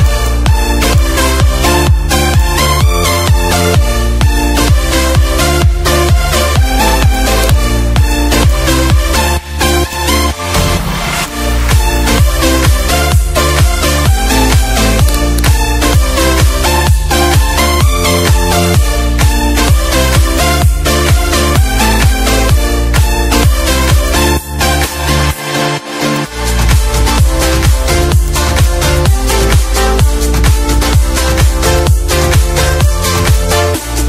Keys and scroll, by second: 1.6 space, 4.2 F5, 4.4 F4, 6.6 v, 9.1 ctrl+c, 13.8 ctrl+shift+f, 16.1 z, 16.9 F2, 18.1 F1, 19.0 ctrl+shift+a, 21.4 ctrl+d, 22.7 ctrl+d, 24.9 ctrl+g, 25.3 -, 26.8 z, 30.8 -, 31.4 space.